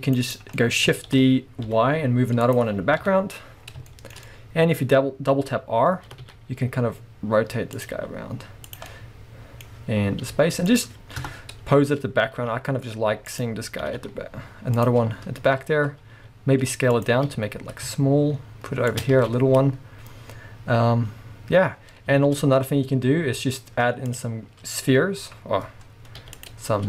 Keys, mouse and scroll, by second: 0.4 right click, 0.6-2.6 middle drag, 1.4 shift+d, 2.6 click, 3.0 KP_7, 3.7 scroll down 2, 3.9-7.9 shift+middle drag, 4.9-6.0 scroll up 2, 6.0 scroll up 1, 6.1 r, 7.9 click, 8.0 r, 8.8 click, 8.9-10.8 middle drag, 10.2 r, 10.8 click, 11.2 KP_0, 12.0-12.5 scroll up 1, 12.5 g, 13.5 click, 13.9 r, 14.9 click, 15.9 scroll up 1, 16.2 s, 17.1 click, 17.3 g, 19.1 click, 19.3 alt+a, 22.0 scroll down 1, 22.2 shift+a, 24.4-26.3 scroll up 1, 26.3 x.